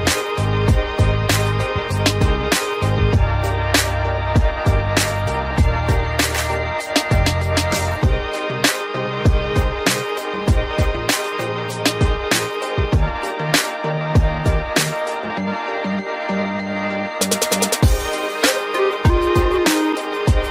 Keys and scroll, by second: 2.6 ctrl+y, 4.2 ctrl+t, 12.2 ctrl+z, 14.1 Return, 16.2 ctrl+j, 17.3 ctrl+t.